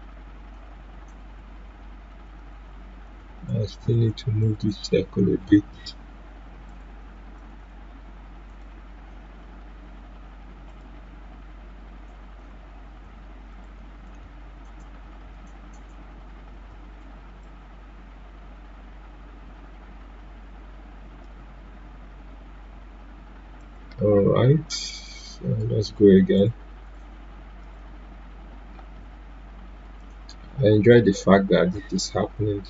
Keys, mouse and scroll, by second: 1.2 ctrl+z, 6.0 Delete, 6.6 click, 7.0 Delete, 7.3 click, 7.5 Delete, 8.4 click, 9.6 Delete, 10.6-17.4 drag, 17.4-23.6 drag, 30.0 click.